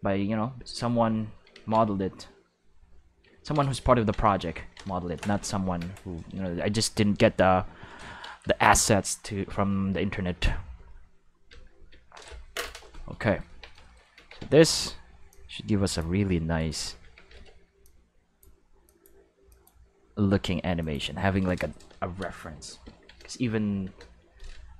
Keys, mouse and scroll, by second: 0.2 click, 1.5 ctrl+z, 2.2 click, 3.4 ctrl+middle click, 6.0-7.6 drag, 9.1 click, 13.5 Tab, 14.1 alt+a, 14.4 c, 15.3-15.9 drag, 16.5 click, 16.5 right click, 17.0 alt+a, 17.3 v, 17.8-18.4 drag, 18.8 click, 19.5 click, 20.8 click, 21.4 right click, 22.8 ctrl+l, 23.3 x, 23.8 Return.